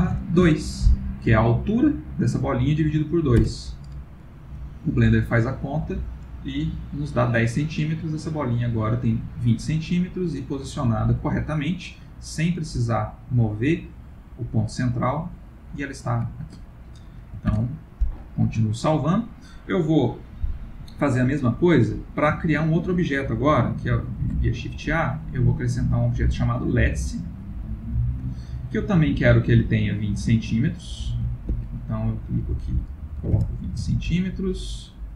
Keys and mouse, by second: 6.5 middle click, 10.1 middle click, 14.0 middle click, 15.2 middle click, 15.6 middle click, 15.8 middle click, 16.4 ctrl+middle click, 17.5 ctrl+s, 18.7 ctrl+middle click, 18.8 ctrl+middle click, 22.5 ctrl+middle click, 24.2 shift+a, 29.8 click, 30.8 ctrl+click, 31.9 click.